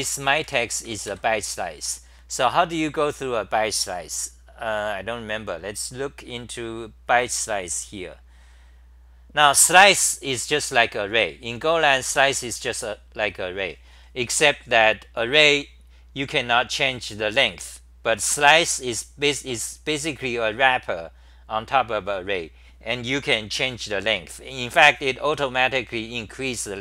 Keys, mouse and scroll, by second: 0.0-1.0 typing, 1.0 ctrl+g.